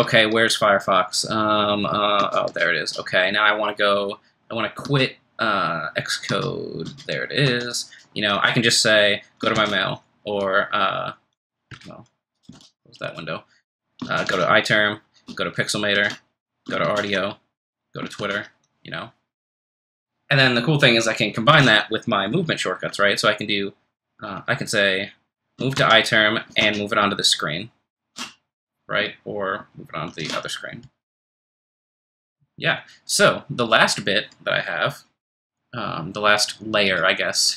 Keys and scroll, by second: 2.2 super+Tab, 4.8 super+Tab, 6.3 super+Tab, 6.8 super+Tab, 7.4 super+q, 9.6 ctrl+f, 9.6 3, 12.5 super+w, 26.6 ctrl+shift+Right, 30.1 ctrl+shift+Left.